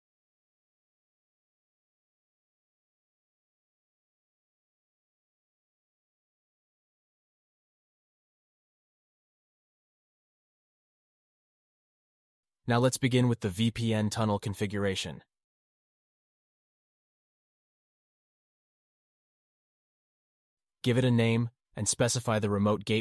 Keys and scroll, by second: 12.3 alt+q, 18.3 alt+q, 20.0 alt+q.